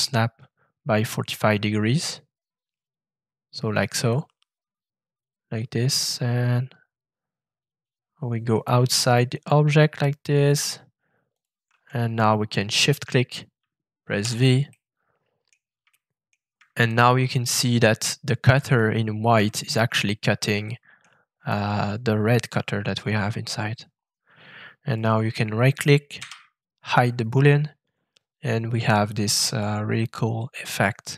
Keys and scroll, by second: 14.2 shift+v, 26.1 <.